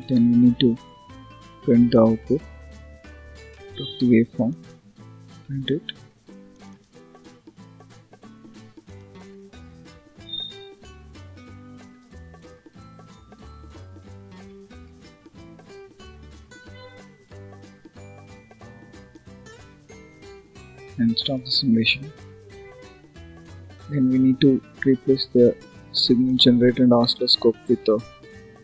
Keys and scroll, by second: 28.4 Delete.